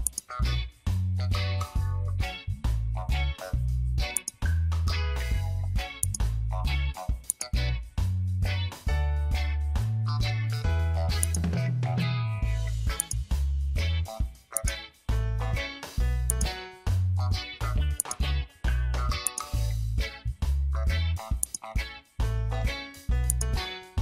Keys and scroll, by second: 5.0 ctrl+z.